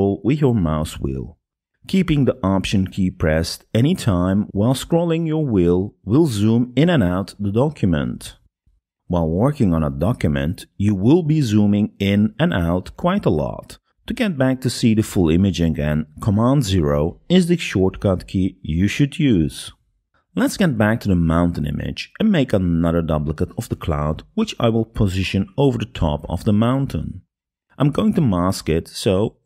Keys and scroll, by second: 19.3 super+0, 27.4 super+0.